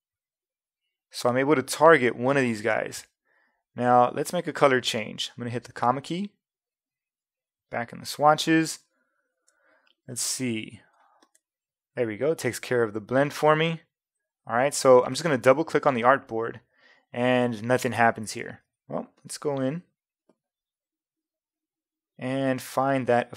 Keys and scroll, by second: 5.6 ,, 18.7 v.